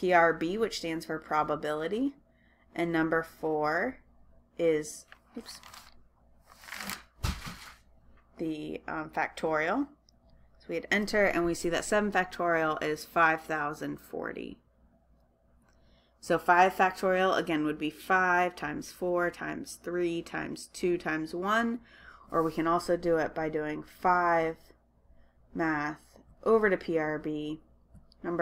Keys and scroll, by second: 0.5 Right, 0.8 Right, 1.7 Right, 4.1 4, 4.6 4, 5.7 Left, 8.0 Delete, 10.4 Return, 24.1 5, 26.4 Left, 28.1 4.